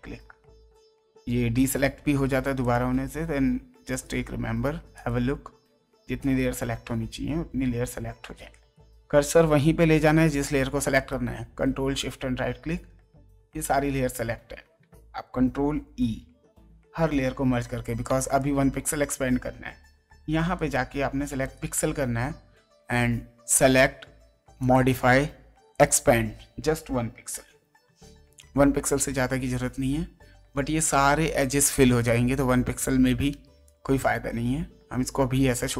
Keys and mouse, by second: 1.5 ctrl+shift+right click, 2.6 ctrl+shift+click, 3.9 ctrl+shift+right click, 4.9 ctrl+shift+click, 6.2 ctrl+shift+right click, 8.5 ctrl+shift+right click, 10.9 ctrl+shift+click, 17.1 ctrl+e, 18.0 ctrl+space, 18.4 ctrl+click, 18.9 space, 20.5 right click, 21.4 click, 23.5 click, 24.6 click, 25.7 click, 27.8 KP_1, 28.3 Return, 33.3 space, 33.6 click.